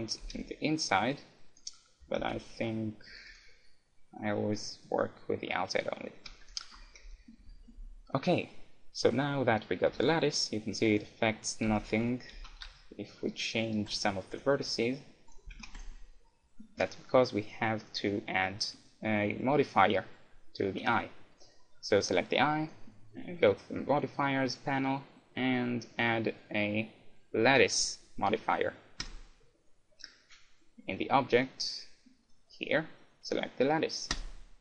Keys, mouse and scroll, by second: 0.2 g, 0.8-3.4 right drag, 2.0 a, 2.2 Tab, 3.4-5.0 drag, 4.2-6.8 middle drag, 6.3 a, 6.5-8.5 right drag, 7.0 KP_1, 7.4 KP_Decimal, 9.9 g, 11.1-13.0 right drag, 11.7 Tab, 12.4 a, 12.6 s, 12.8 middle click, 14.0-17.4 right drag, 14.5 g, 15.5 a, 15.6 Tab, 17.8-19.6 drag, 19.7-21.3 drag, 21.4-24.4 drag, 32.2-34.0 drag.